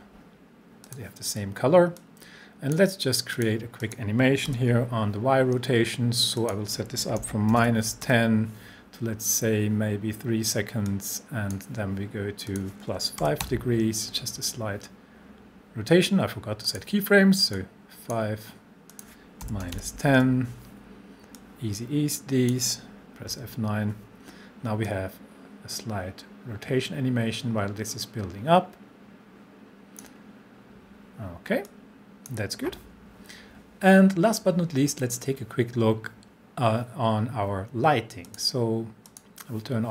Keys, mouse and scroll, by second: 4.5 r, 6.4 click, 7.0-8.1 typing, 10.9-11.8 drag, 13.2 5, 16.6 click, 19.2-20.2 typing, 21.4-22.6 drag, 23.3 F9, 24.9-30.2 drag, 34.8 scroll up 1, 38.2 click.